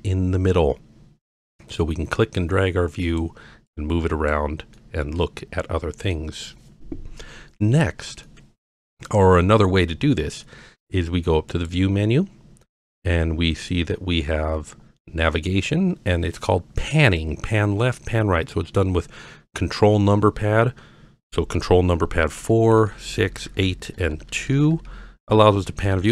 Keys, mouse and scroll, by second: 1.6-3.2 drag, 3.7-4.3 drag, 4.8-6.1 middle drag, 7.1-7.9 scroll down 4, 8.3-8.8 middle drag, 11.5-20.2 drag, 22.2 ctrl+KP_4, 22.4 ctrl+KP_4, 22.7 ctrl+KP_6, 22.9 ctrl+KP_6, 23.0 ctrl+KP_6, 23.3 ctrl+KP_8, 23.5 ctrl+KP_8, 23.6 ctrl+KP_8, 23.9 ctrl+KP_2, 24.0 ctrl+KP_2, 24.2 ctrl+KP_2, 24.4 ctrl+KP_2, 24.6 ctrl+KP_6, 24.7 ctrl+KP_6, 24.9 ctrl+KP_6, 25.3 ctrl+KP_2, 25.5 ctrl+KP_2, 25.6 ctrl+KP_2, 25.8 ctrl+KP_8, 26.0 ctrl+KP_8.